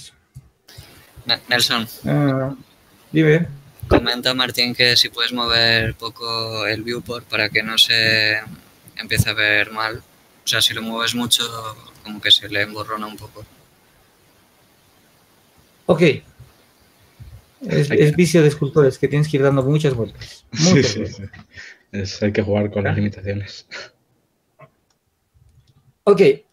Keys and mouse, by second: 17.5 Tab, 20.0 shift+z.